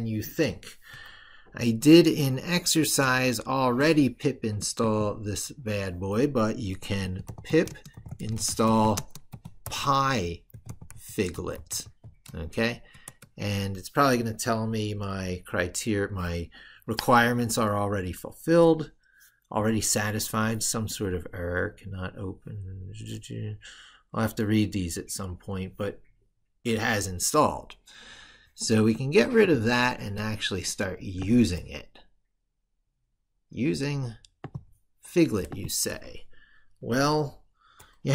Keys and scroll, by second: 2.3 ctrl+super+Right.